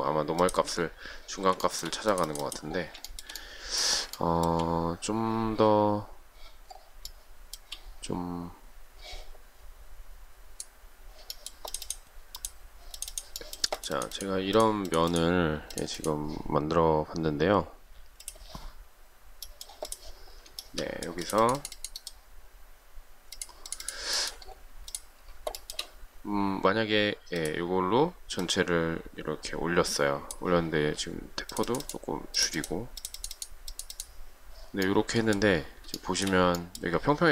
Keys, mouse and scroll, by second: 1.7 shift+middle click, 4.2 shift+middle click, 7.1 shift+middle click, 20.9 shift+middle click, 25.8 shift+middle click, 36.3 shift+middle click.